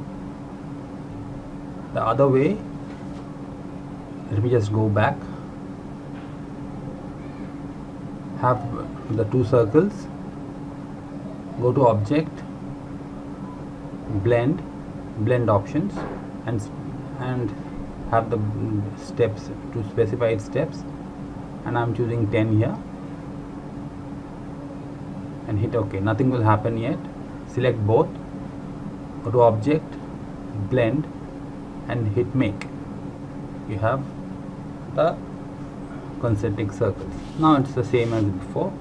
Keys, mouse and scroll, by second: 4.7 ctrl+Num_Lock, 5.2 ctrl+z, 5.6 ctrl+z, 6.0 ctrl+z, 6.3 ctrl+z, 6.8 ctrl+z, 9.1 click, 12.2 click, 15.3 click, 19.7 click, 22.9-23.6 scroll down 1, 23.6-25.7 scroll up 1, 25.7 click, 32.6 click, 36.3 click.